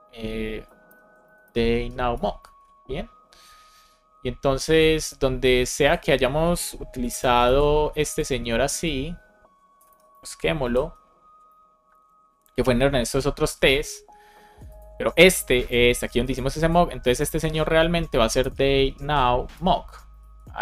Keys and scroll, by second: 0.8 shift+super+h, 2.1 Return, 2.4 super+s, 7.0 alt+shift+f, 7.4 super+s, 9.9 super+c, 10.6 shift+super+f, 17.2 shift+super+Right, 18.8 shift+n, 19.5 Return, 20.1 super+s.